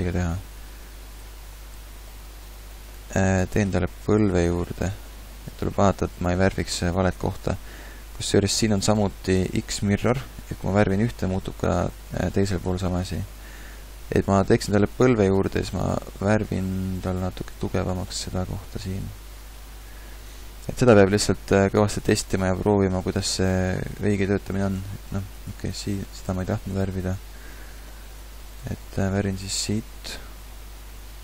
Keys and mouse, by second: 1.1 f, 4.4 ctrl+z, 8.5 ctrl+z, 17.0 f, 24.9 ctrl+z, 25.2 ctrl+z, 25.4 ctrl+z, 25.8 ctrl+z, 26.9 ctrl+z.